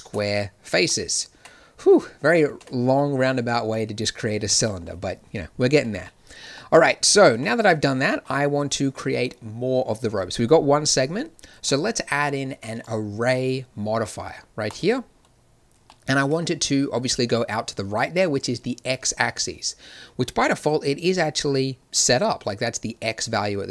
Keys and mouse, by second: 1.3 Tab, 2.5 Tab, 7.2 a, 7.5 Tab.